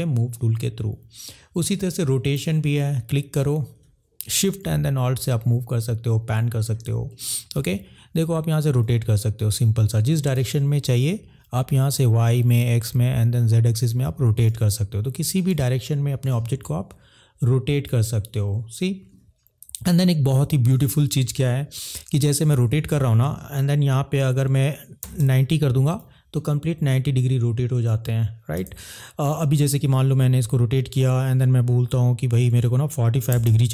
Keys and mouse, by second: 2.1 click, 4.6 shift+middle click, 10.9 ctrl+z, 13.7 click, 15.5 ctrl+z, 16.5 click, 19.7 ctrl+z, 22.4 click, 24.9 9, 25.1 0, 28.7 ctrl+z, 29.7 click, 33.3 4, 33.5 5.